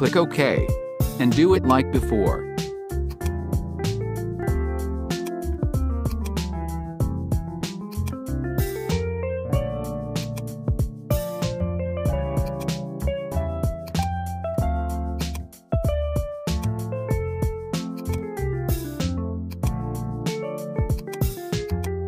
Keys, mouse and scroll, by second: 1.4 click, 3.1-12.6 drag, 12.9 scroll down 1, 13.9 click, 15.2-17.3 drag, 18.1 click, 19.6 click, 21.0 click, 21.9-22.0 drag.